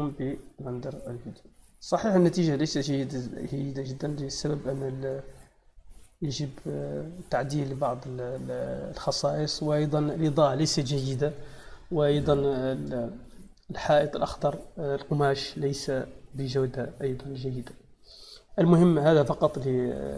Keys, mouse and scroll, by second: 0.8-1.3 drag, 2.5 click, 3.9-4.3 drag, 5.4-5.8 scroll down 1, 5.8-6.4 scroll up 1.